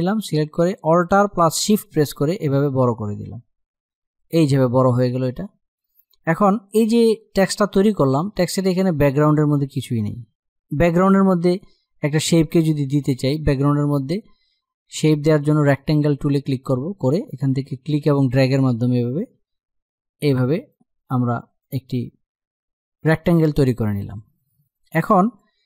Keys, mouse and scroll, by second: 0.5-5.3 drag, 6.7 space, 6.8 click, 7.1 space, 15.4 click, 17.8-22.9 drag, 22.9 click.